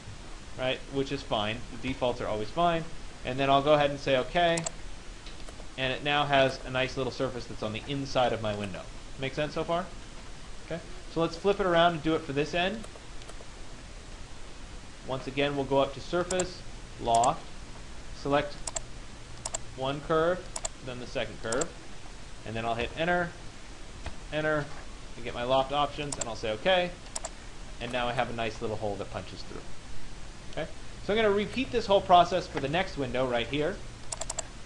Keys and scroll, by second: 1.5 Return, 22.4 Return.